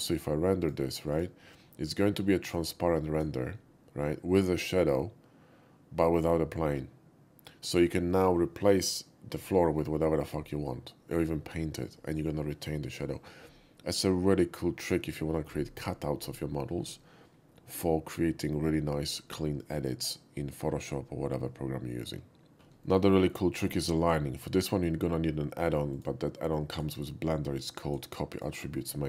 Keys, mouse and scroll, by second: 0.6 click, 1.1 click, 2.4 click, 18.3 typing, 22.5 middle click, 22.9 shift+middle click, 23.2 shift+middle click, 25.9 click, 26.7 click, 27.6 click, 28.3 click.